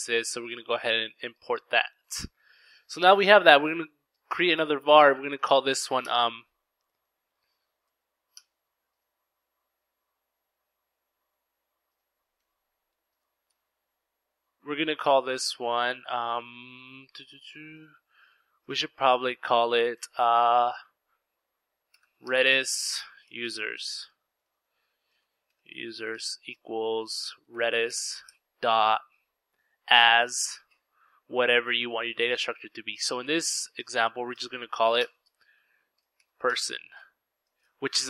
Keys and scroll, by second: 0.1 typing, 3.4-5.1 typing, 6.7 typing, 10.7-11.9 typing, 13.9-14.4 typing, 20.4-28.6 typing, 33.5-37.6 typing.